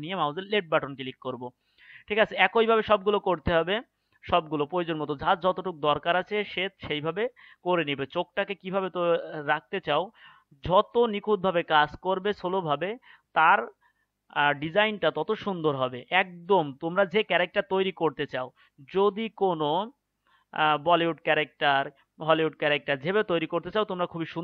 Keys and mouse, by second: 1.6-3.4 right drag, 6.2-7.4 right drag, 9.2 right click, 10.4-14.1 right drag, 15.6-17.5 right drag, 19.0-21.6 right drag, 23.1-24.4 right drag.